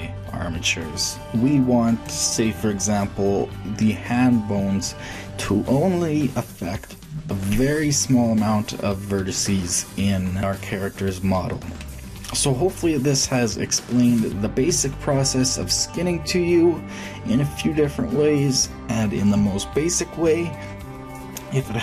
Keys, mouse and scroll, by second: 9.8-13.1 middle drag, 13.4 click.